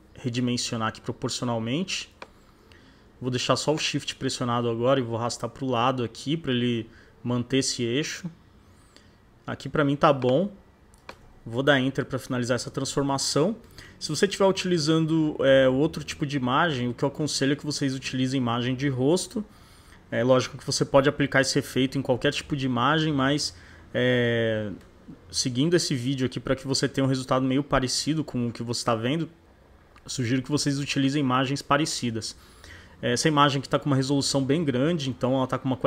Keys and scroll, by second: 11.6 shift+Return, 12.2 Return.